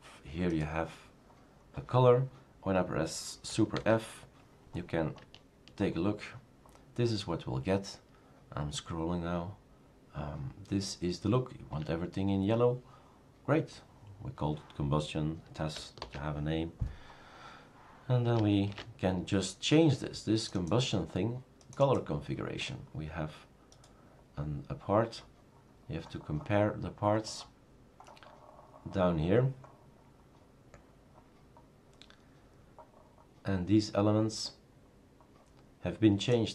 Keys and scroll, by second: 3.9 super+f, 16.0 super+f, 18.8 shift+super+q.